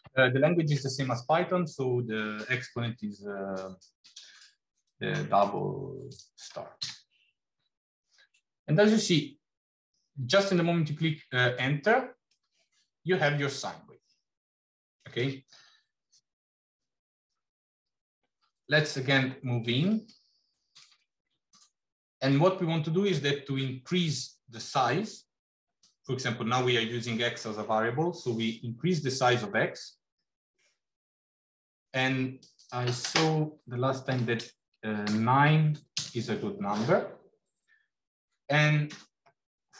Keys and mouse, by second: 12.2-15.0 middle drag, 18.6 shift+middle click, 19.9 shift+middle click, 25.6-32.3 drag, 32.4-36.8 drag.